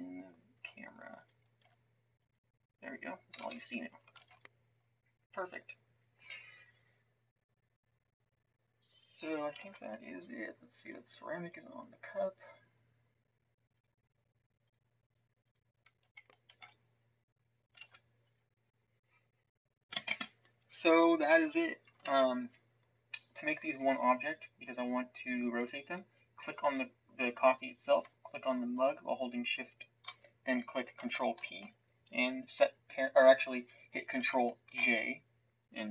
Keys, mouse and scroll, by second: 1.6 s, 3.4 shift+z, 4.2 ctrl+s, 9.6 shift+z, 16.5 ctrl+s, 17.8 shift+z, 22.0 shift+z, 31.3 ctrl+p, 34.7 ctrl+j.